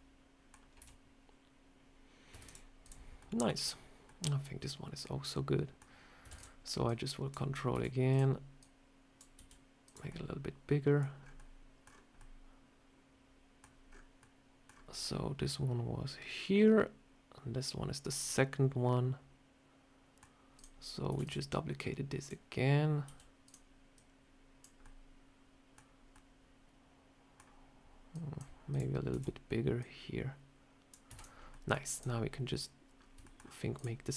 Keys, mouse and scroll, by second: 0.7 Tab, 2.2 Tab, 2.4 click, 2.7 click, 3.1 middle click, 4.0 middle click, 4.9 middle click, 6.2 shift+d, 6.8 click, 7.6 s, 8.5 click, 9.3 s, 10.0 middle click, 11.1 scroll up 3, 11.3 middle click, 11.7 scroll down 4, 12.1 middle click, 18.2 middle click, 20.4 click, 21.1 shift+d, 21.6 click, 22.9 s, 23.8 click, 24.7 middle click, 25.9 scroll up 1, 26.0 middle click, 28.0 click, 28.6 click, 29.0 Tab, 29.7 click, 30.9 Tab, 31.0 click, 31.2 scroll up 1, 31.4 middle click, 31.8 click, 32.8 scroll up 2, 33.1 shift+middle click, 33.6 shift+click, 34.0 click.